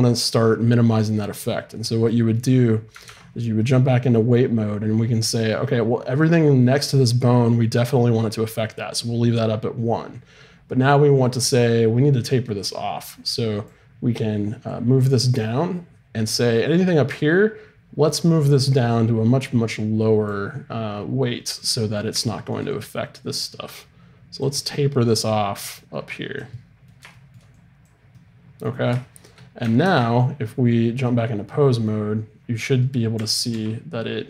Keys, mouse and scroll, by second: 2.1-3.2 middle drag, 2.5-4.3 drag, 3.0 ctrl+Tab, 11.1-16.3 drag, 16.3-18.9 middle drag, 18.9-21.2 drag, 21.6 middle click, 22.4 middle click, 22.7-24.6 drag, 24.6-26.5 middle drag, 26.5-29.8 drag, 27.5 middle click, 29.8 ctrl+Tab, 30.9-34.2 right drag, 33.1 r.